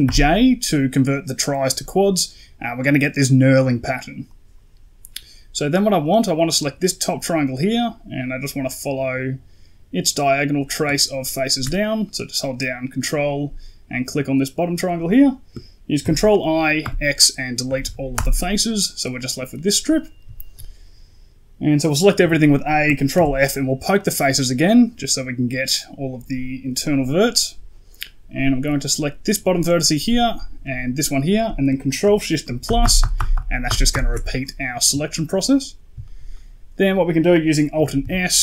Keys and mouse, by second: 4.1 click, 7.0 middle click, 11.3 ctrl+right click, 11.9 middle click, 15.9 ctrl+i, 16.7 x, 17.7 Down, 19.7 middle click, 20.2 shift+middle click, 22.1 a, 23.0 ctrl+f, 24.3 middle click, 28.5 right click, 30.2 shift+right click, 32.5 ctrl+shift+KP_Add, 32.7 ctrl+shift+KP_Add, 32.9 ctrl+shift+KP_Add, 33.2 ctrl+shift+KP_Add, 34.9 shift+middle click, 35.4 middle click, 35.9 shift+middle click, 36.2 middle click, 37.9 alt+s.